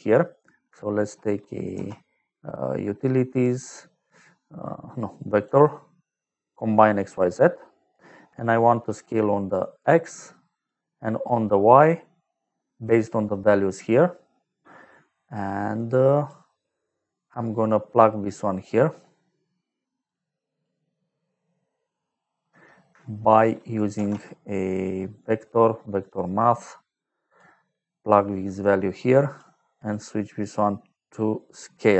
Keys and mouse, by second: 0.5 click, 1.7 shift+a, 5.2 click, 6.4 click, 6.8 click, 9.5 click, 12.3 click, 15.4 click, 16.6 middle click, 17.9 click, 19.2 middle click, 20.0 click, 21.0 middle click, 23.9 shift+a, 25.9 click, 27.2 click, 28.1 click, 29.7 click, 31.4 click.